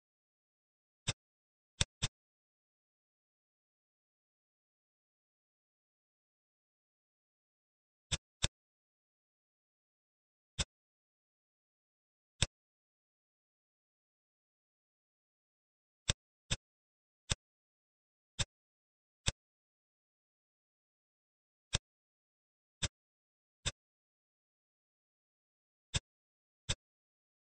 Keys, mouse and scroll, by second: 1.1 middle click, 1.8 click, 2.0-3.6 middle drag, 7.4 Tab, 8.1 click, 8.4-9.9 middle drag, 10.5 click, 11.1 shift+d, 14.0 g, 16.5-17.2 middle drag, 17.2 click, 18.4 middle click, 19.3 click, 21.6 click, 22.8 drag, 23.6-24.5 middle drag, 24.5 s, 26.6 click.